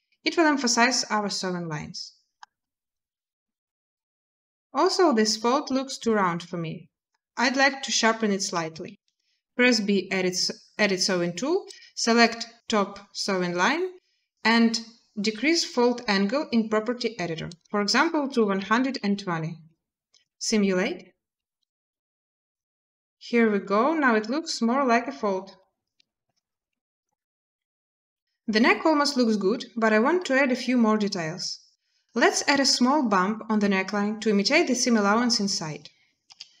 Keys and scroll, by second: 9.2 b, 18.1-18.7 typing, 20.0 space, 23.8 typing, 26.0 space, 28.1 z, 36.0 z.